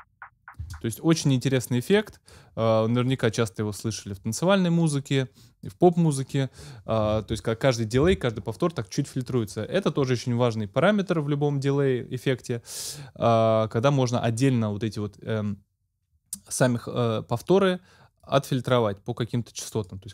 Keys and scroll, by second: 0.6 space.